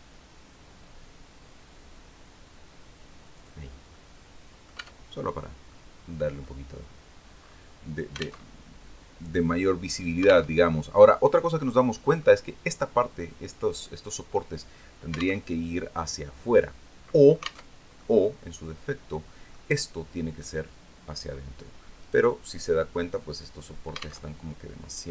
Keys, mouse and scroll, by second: 2.8 click, 3.2 scroll down 1, 3.4 click, 4.2 Tab, 4.6 scroll down 1, 4.8 click, 5.5 scroll down 2, 6.5 scroll down 2, 7.9 alt+Tab, 10.0 alt+Tab, 10.5-11.9 middle drag, 14.9 alt+Tab, 17.2 alt+Tab, 17.4-19.1 alt+middle drag, 21.5 right click, 23.7 alt+Tab.